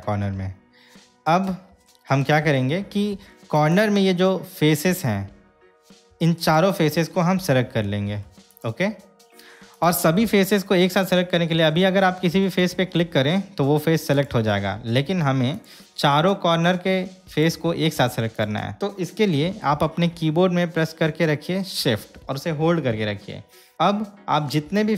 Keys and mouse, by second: 2.1 shift+middle click, 6.6 shift+click, 10.0-15.9 drag, 17.5 click, 18.5 click.